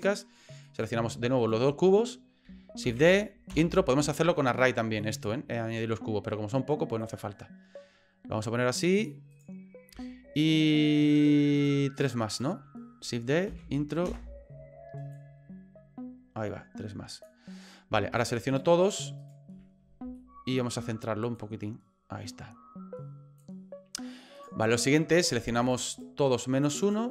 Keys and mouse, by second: 0.6 right click, 1.4 shift+right click, 2.8 shift+d, 5.0 shift+middle click, 7.0-9.0 drag, 9.3 right click, 11.6 shift+right click, 11.9 shift+right click, 12.3 shift+right click, 13.5 shift+d, 15.1-17.2 drag, 18.1 shift+right click, 18.5 shift+right click, 18.8 shift+right click, 19.2 shift+right click, 20.3 shift+middle click, 21.3-23.4 drag, 24.3 right click, 25.2 right click, 25.6 shift+right click, 25.9 shift+right click, 26.3 shift+right click, 26.6 shift+right click, 26.8 shift+right click.